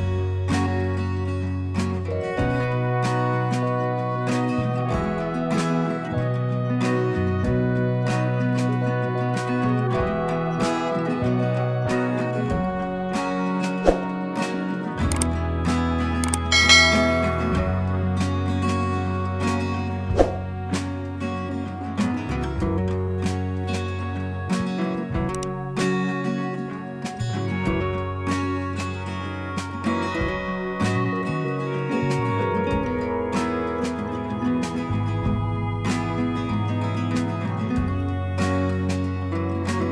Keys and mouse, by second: 0.5 click, 6.1 click, 9.8 click, 15.6 click, 19.3 click, 20.1 click, 23.9 click, 26.7 click, 28.5 click, 30.7 click, 36.5 click, 36.6 click, 37.7 click.